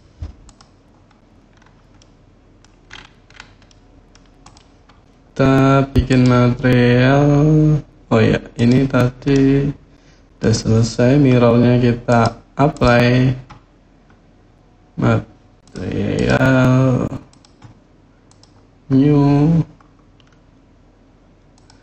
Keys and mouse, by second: 0.6 click, 1.7-2.4 middle drag, 3.4-3.9 middle drag, 5.9 click, 8.3 click, 9.1-10.2 middle drag, 11.9-12.6 drag, 15.9 click, 17.1 click, 18.0-19.2 drag, 21.4-21.8 drag.